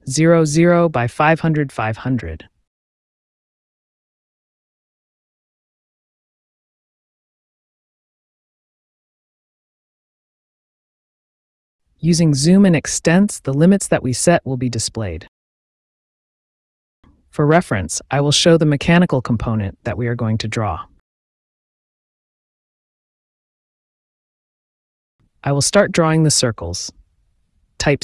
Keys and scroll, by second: 0.5 Return, 3.7 KP_0, 4.2 ,, 4.4 KP_0, 5.5 Return, 8.0-9.4 typing, 11.9 Return, 14.6 z, 15.8 Return, 17.0 e, 17.4 Return, 24.1 c, 25.3 space.